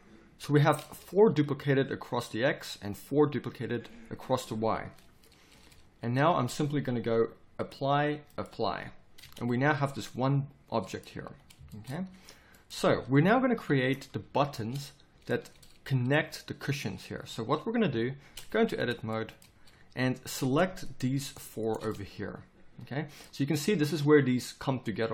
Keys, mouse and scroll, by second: 5.7 z, 9.2 Tab, 11.2 a, 13.2 KP_7, 13.5 z, 14.2 z, 14.5 Tab, 16.2 z, 17.8 KP_7, 18.2 Tab, 18.6 z, 20.4 right click, 21.9-25.1 middle drag.